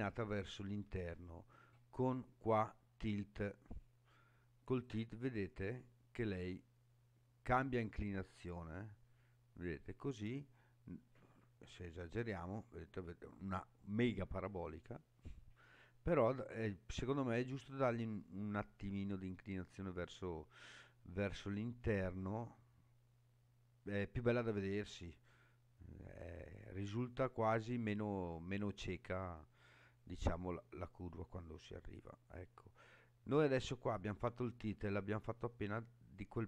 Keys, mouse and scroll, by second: 4.8-28.8 drag, 29.5-33.8 middle drag, 34.4-35.7 middle drag.